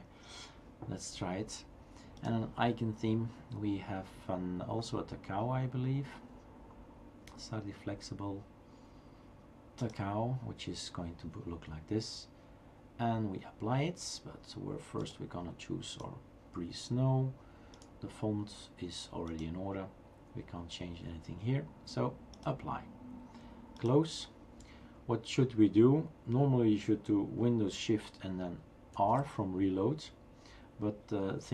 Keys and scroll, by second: 28.9 shift+super+r.